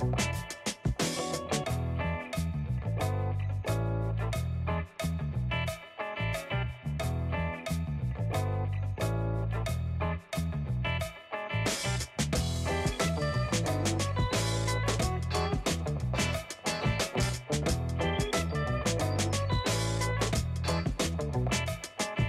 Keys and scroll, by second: 9.4 space, 22.0 space.